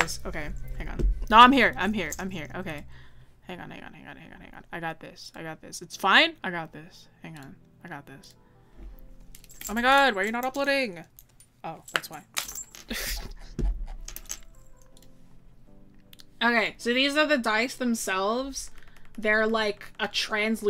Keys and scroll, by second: 18.9 scroll down 1, 19.6-20.6 scroll down 1.